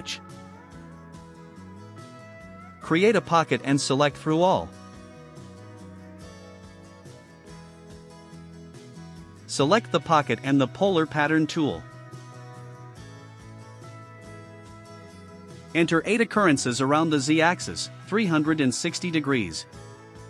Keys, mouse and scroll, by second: 0.3 click, 2.4 click, 3.4 click, 4.0 click, 9.7 click, 14.4 click, 16.6 click, 18.3 8.